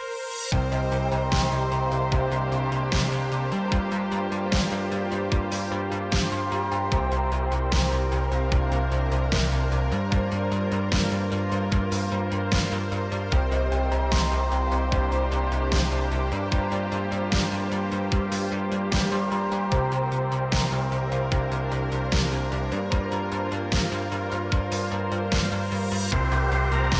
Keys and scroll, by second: 3.1 Tab, 17.3 c, 20.1 c, 22.8 c, 24.0 c.